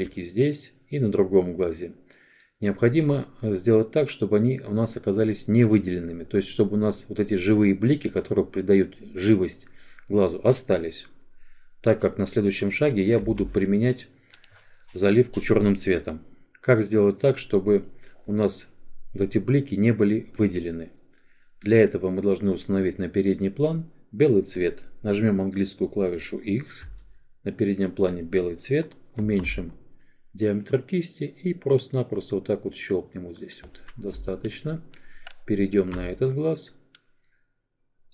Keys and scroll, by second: 25.4 x.